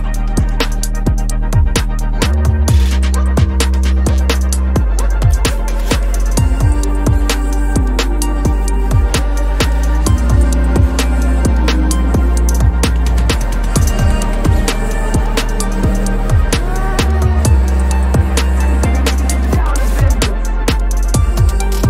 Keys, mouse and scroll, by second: 1.6 alt+shift+click, 2.2 ctrl+z, 2.9 right click, 4.5 double click, 4.5-6.4 typing, 8.2-8.7 typing, 9.3 Return, 15.6 alt+shift+click, 16.1 double click, 16.5 typing, 17.8-18.2 typing, 19.1 double click, 19.7 ctrl+c, 20.3 double click, 20.8 typing, 21.2 Return, 21.4 right click.